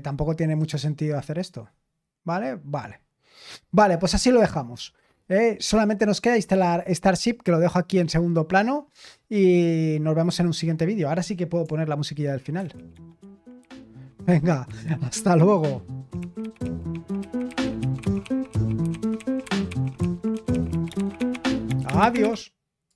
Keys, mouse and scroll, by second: 12.5 super+x, 22.9 click.